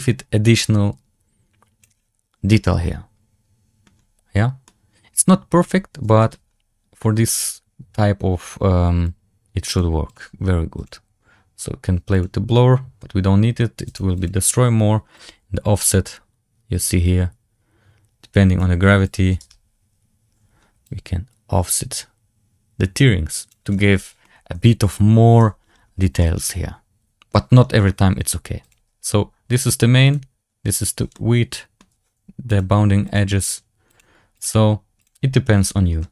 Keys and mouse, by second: 2.5-3.7 middle drag, 4.5-5.4 middle drag, 6.1 shift+middle drag, 9.0-10.2 drag, 11.0 click, 13.7 click, 15.0-18.7 drag, 19.0 click, 20.7-23.4 drag, 24.1-24.6 middle drag, 24.8 z, 25.3 z, 26.1-27.2 middle drag, 28.7 click, 31.0-31.7 middle drag, 32.6-36.1 drag.